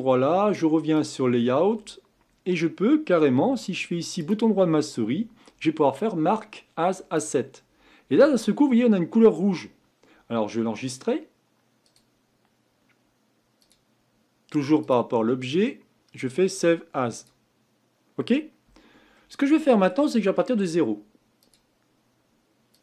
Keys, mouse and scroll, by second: 1.0 click, 7.3 right click, 13.9-17.6 drag, 19.1-22.8 middle drag.